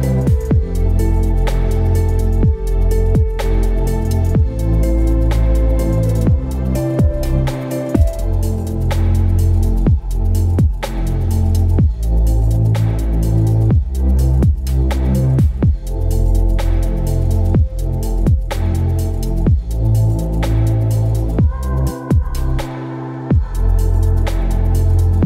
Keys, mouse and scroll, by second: 12.5 v, 24.1 ctrl+t.